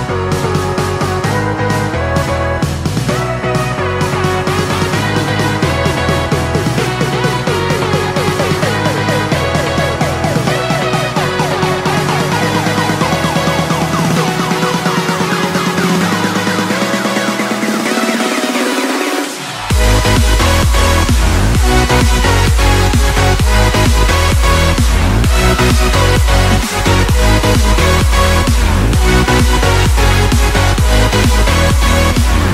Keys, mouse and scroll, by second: 9.6-13.5 middle drag, 13.5 click, 21.7 shift+click, 22.2 shift+click, 25.8-27.1 middle drag, 27.1 shift+click, 27.9-32.5 middle drag.